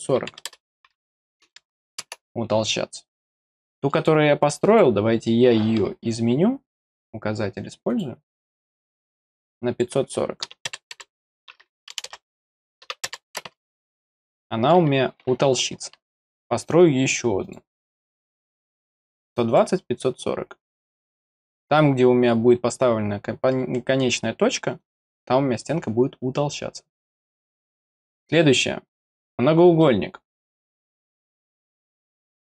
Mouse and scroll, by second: 3.6 middle click, 4.6 click, 6.9 click, 7.9 click, 9.1 click, 9.5 click, 14.3 middle click, 17.4 click, 19.4 click, 24.8 click, 29.0 click, 29.8 middle click, 31.0 click, 32.0 click.